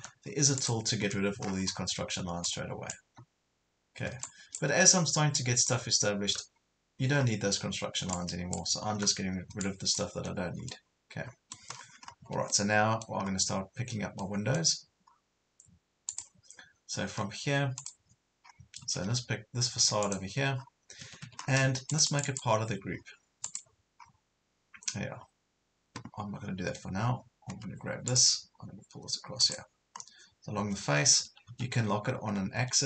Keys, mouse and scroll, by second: 0.0 Delete, 0.6 click, 1.5 scroll down 1, 2.5 click, 3.1 Delete, 4.3 click, 6.3 Delete, 7.2-7.5 scroll down 1, 7.5-8.1 scroll up 1, 8.1-9.1 drag, 9.0 Delete, 10.2 Delete, 10.7 middle click, 11.7 scroll up 1, 12.2 Escape, 12.4 scroll up 1, 12.5 middle click, 13.3 scroll up 1, 14.2 middle click, 15.1 scroll down 1, 16.1 click, 16.6-17.4 scroll up 1, 17.8 click, 18.5-18.8 scroll up 1, 18.9 Escape, 20.1 click, 20.6 scroll down 1, 21.0 Escape, 21.4 scroll down 1, 21.9 click, 22.9-23.5 scroll down 1, 23.5 click, 24.0 scroll up 1, 28.1 click, 29.9 scroll up 1, 31.1 Right, 31.5 Left, 32.3 scroll down 1, 32.6 Right.